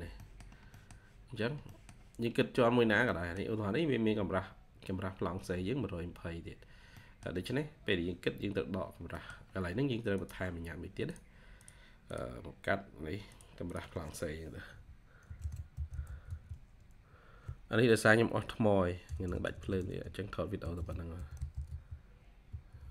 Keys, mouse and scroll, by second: 0.1 middle click, 0.8-1.3 scroll up 1, 1.6 middle click, 1.9-2.3 scroll up 1, 3.0 middle click, 4.2-5.2 scroll up 1, 6.1-6.8 scroll down 1, 6.8 middle click, 9.0 middle click, 13.5 double click, 15.4-16.6 typing, 18.9-19.7 typing, 20.8-22.7 typing.